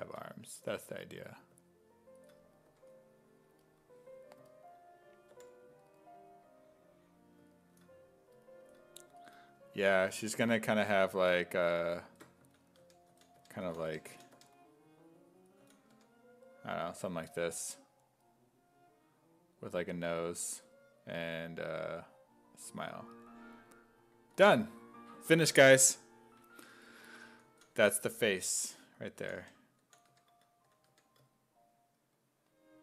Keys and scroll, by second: 0.8 1, 2.7 1, 5.3 5, 10.4 s, 11.7 ctrl+d, 12.1 ctrl+d, 12.2-15.9 typing, 24.4 s, 27.5-30.9 typing.